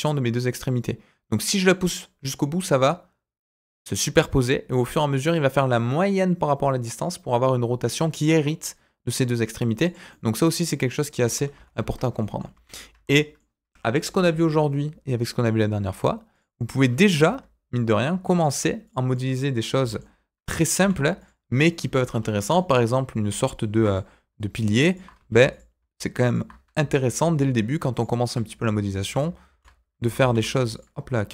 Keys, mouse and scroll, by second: 10.1-11.1 middle drag, 11.3 ctrl+z, 11.5 ctrl+z, 11.7 ctrl+z, 12.2 middle click, 12.5 ctrl+z, 12.9 Tab, 13.1 middle click, 14.0 Delete, 14.2 shift+a, 16.6 middle click, 17.1 Tab, 18.3 click, 18.8 click, 19.1 middle click, 19.7 g, 21.4 scroll down 2, 21.6 middle click, 22.0 Tab, 22.1 scroll up 2, 22.4 middle click, 22.6 Tab, 23.7 ctrl+r, 25.2 ctrl+r, 27.0 click, 27.9 alt+click, 28.9 alt+shift+click, 29.4 alt+z, 30.0 alt+z, 30.2 alt+e.